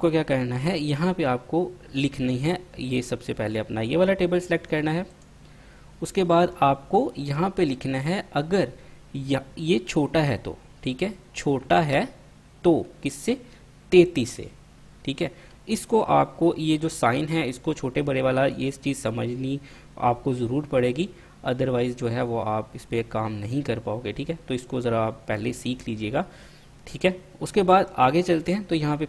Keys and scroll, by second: 11.8 <, 14.4 3, 14.6 3.